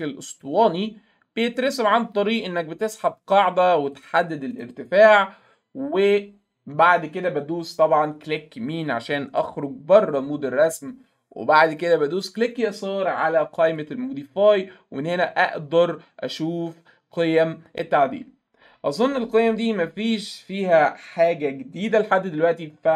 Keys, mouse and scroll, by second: 0.4-2.6 drag, 3.9 click, 4.6 right click, 13.7 click.